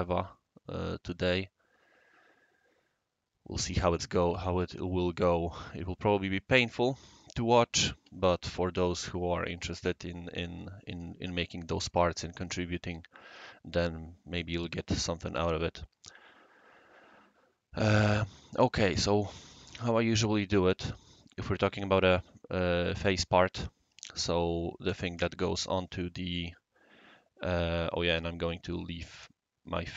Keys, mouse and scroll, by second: 18.0 click, 18.3 click, 18.5 click.